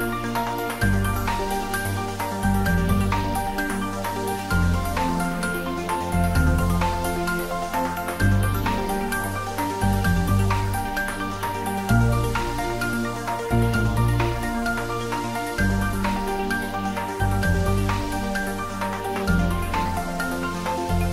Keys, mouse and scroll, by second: 0.2 alt+shift+click, 1.2-2.1 shift+middle click, 2.6 click, 3.2 scroll up 1, 4.4 g, 5.0 x, 8.2 Left, 8.7 click, 9.4-11.3 scroll down 1.